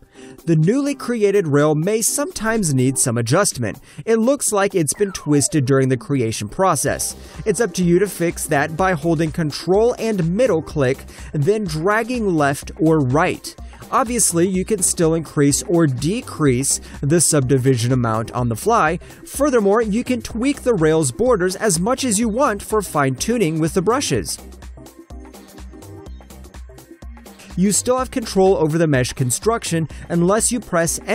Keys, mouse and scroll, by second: 0.4 alt+click, 2.8 alt+right click, 3.0 alt+click, 3.3 alt+right click, 4.0 alt+middle click, 4.3 alt+click, 9.4 ctrl+middle click, 12.2 alt+click, 13.6 shift+middle click, 14.9 alt+click, 15.3 ctrl+middle click, 17.4 ctrl+middle click, 19.2 alt+click, 20.0 shift+middle click, 21.4 shift+scroll up 1, 21.5 alt+click, 22.8 middle click, 24.5 alt+click, 24.8 ctrl+shift+middle click, 25.2 alt+click, 25.6 ctrl+middle click, 27.8 middle click.